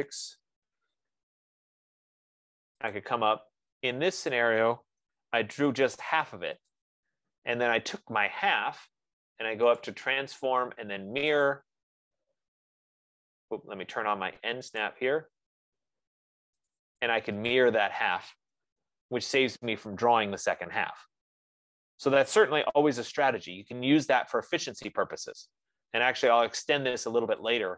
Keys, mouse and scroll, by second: 0.0-0.6 typing, 3.4 click, 4.6 click, 7.2 click, 10.2 click, 11.9 click, 15.2 click, 17.1 click, 18.0 click, 19.2 Return, 23.1 Return, 24.6 F15, 25.0 Escape, 25.2 Escape, 26.6 click.